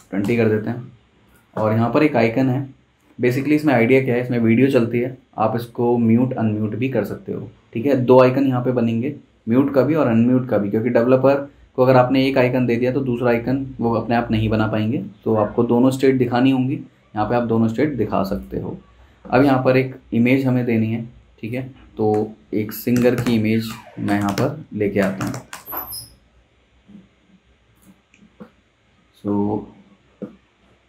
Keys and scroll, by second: 0.0-0.5 typing, 22.1 super+t, 22.7-25.9 typing.